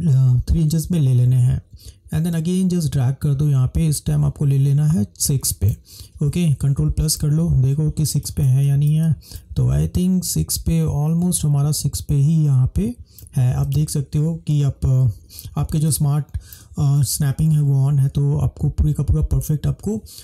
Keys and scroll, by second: 7.2 ctrl+=, 7.4 ctrl+=, 7.5 ctrl+=, 7.6 ctrl+=, 8.3 ctrl+space, 14.6 ctrl+-, 14.9 ctrl+-, 15.0 ctrl+-, 15.2 ctrl+-, 15.8 ctrl+space.